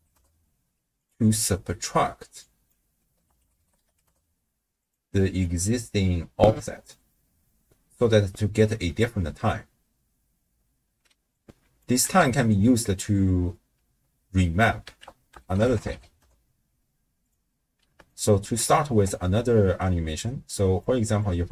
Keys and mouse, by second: 2.4-4.9 drag, 5.4-6.6 drag, 6.9 middle click, 11.5 click, 12.0 x, 12.3 middle click, 14.9 ctrl+a, 17.8 d, 18.1 right click, 18.4 d, 18.6 d, 20.2-20.8 drag, 21.2 click.